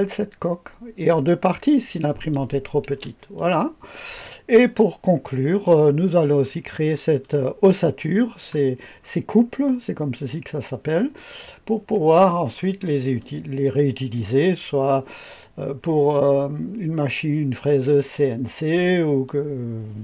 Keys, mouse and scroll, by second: 2.9 typing, 3.3 click, 4.5-5.7 drag, 5.9 click, 6.1-6.6 scroll up 1, 6.6-7.2 scroll down 1, 7.2-8.4 drag, 8.7-11.2 scroll up 1, 12.2-13.2 scroll up 1, 13.2-19.3 drag.